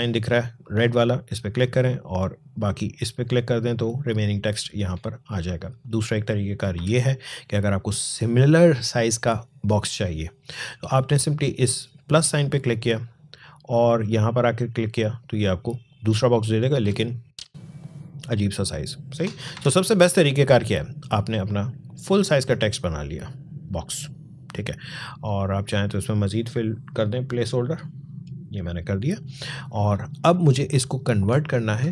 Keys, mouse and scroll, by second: 1.3 click, 5.6 click, 6.6 Delete, 9.1 click, 12.3 click, 19.4 Delete, 20.4-25.1 drag, 27.7 click.